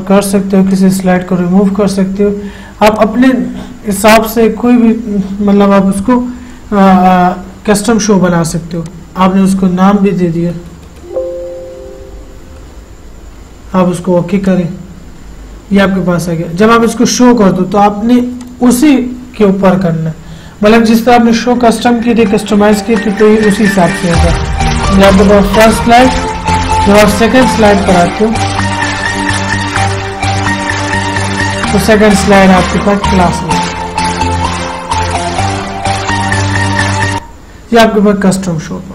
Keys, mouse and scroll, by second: 3.2 click, 9.2-11.8 drag, 12.0 h, 14.8 click, 18.7 click, 27.5 Right, 30.3 Right.